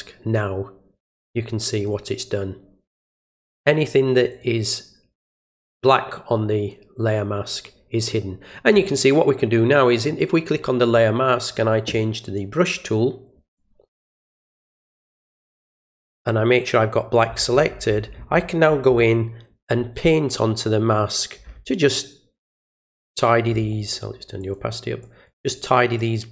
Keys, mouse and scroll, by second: 1.7 click, 3.5 click, 4.2 alt+click, 9.9 alt+click, 21.9 alt+click, 22.8 alt+click, 24.3 alt+click, 25.0 click, 25.9-26.3 alt+drag.